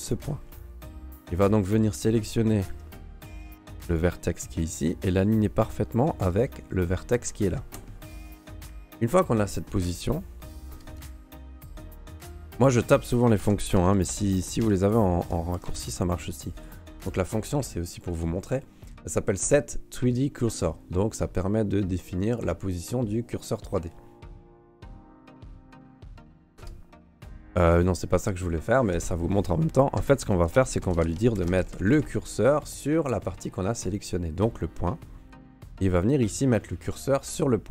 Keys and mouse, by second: 1.1 alt+middle click, 1.4 alt+middle click, 3.1 middle click, 3.9 right click, 5.4 right click, 6.3 g, 10.7 space, 14.2 BackSpace, 25.8 space, 30.0 space, 37.4 middle click.